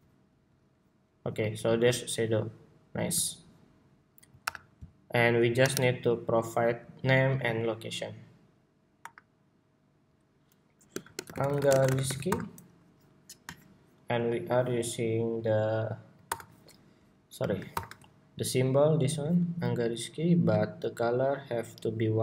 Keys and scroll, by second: 2.8 super+s, 4.5 super+-, 5.3 super+=, 6.1 super+=, 12.3 Escape, 16.0 super+y, 17.4 shift+super+y.